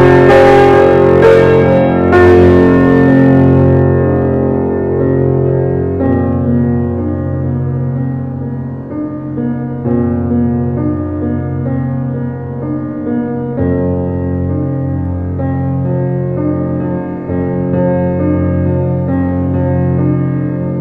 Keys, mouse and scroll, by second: 0.5 g, 1.4 scroll down 2, 1.6-3.6 shift+middle drag, 3.6 click, 4.1 alt+middle click, 4.9 shift+d, 7.3 g, 9.0 middle click, 9.5-10.3 scroll up 4, 9.7-10.0 shift+middle drag, 10.3-10.8 shift+middle drag, 10.9 alt+middle click, 11.2-12.0 scroll up 3, 11.5 shift+middle drag, 12.0-12.5 shift+middle drag, 12.5 g, 16.4 scroll down 1, 16.6-17.0 middle drag, 17.0-17.6 scroll down 1, 17.6 alt+middle click, 19.0 s, 20.6-20.8 scroll down 5.